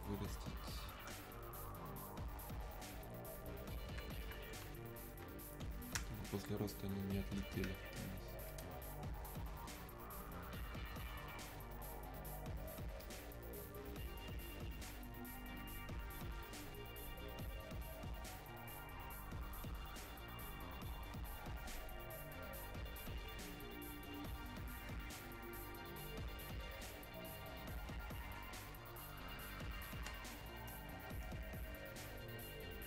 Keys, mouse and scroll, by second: 0.3 click, 0.6 space, 1.8-5.7 drag, 6.0 space, 6.6 click, 6.7 space, 7.9-13.0 alt+drag, 29.3 click, 30.2 space, 31.1-32.8 drag.